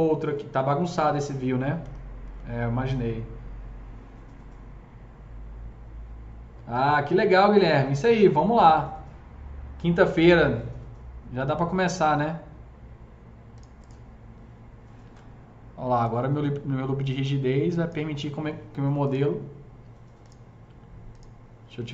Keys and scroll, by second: 1.8 F3, 2.2 F3, 10.1 KP_0.